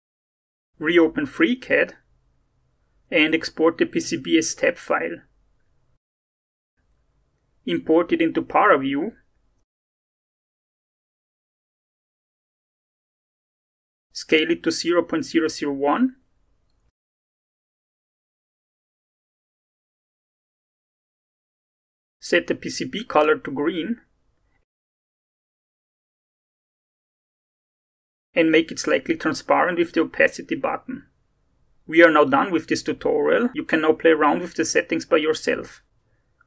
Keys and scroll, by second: 2.1 Return, 4.4 ctrl+e, 6.1 p, 6.2 c, 6.3 b, 6.7 Return, 8.9 alt+Tab, 18.4-20.4 typing, 19.0 Tab, 19.8 Tab, 20.6 Return, 30.3 0, 30.5 ., 30.6 5, 30.7 Return.